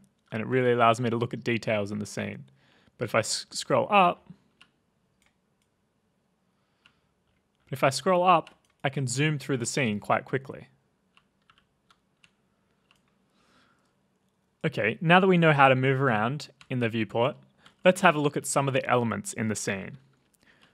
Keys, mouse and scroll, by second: 0.0-4.5 typing, 2.9 middle click, 3.1 middle click, 3.5 middle click, 3.5 middle click, 3.8 middle click, 3.9 middle click, 3.9 middle click, 4.1 middle click, 4.1 middle click, 4.5 right click, 4.5 scroll, 5.2 right click, 6.1 scroll, 6.8 right click, 6.8 middle click, 6.8-8.4 typing, 6.9 right click, 7.2-7.7 scroll, 7.7 middle click.